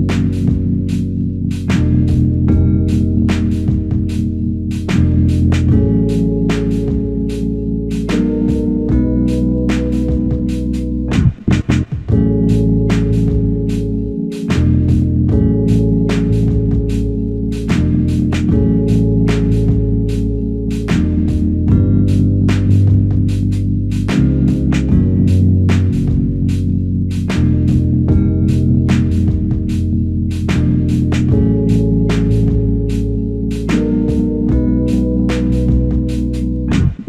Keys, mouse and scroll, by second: 14.2 f, 23.7 ctrl+alt+click, 26.9 ctrl+z, 27.1 ctrl+z, 28.6 alt+click, 31.5 alt+click.